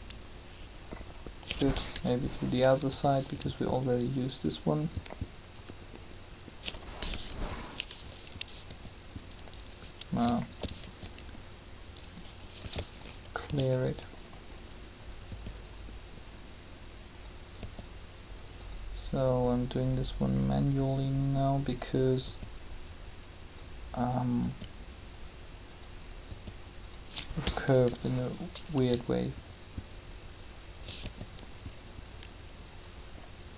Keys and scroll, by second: 1.9 7, 6.9 3, 10.8 shift+r, 15.3 r, 17.6 r, 22.2 r, 24.4 r, 31.0 shift+r.